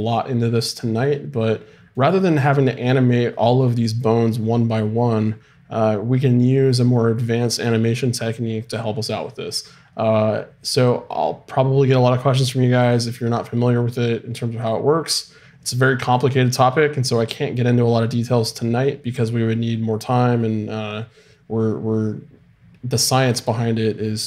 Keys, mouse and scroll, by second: 1.3-17.0 middle drag.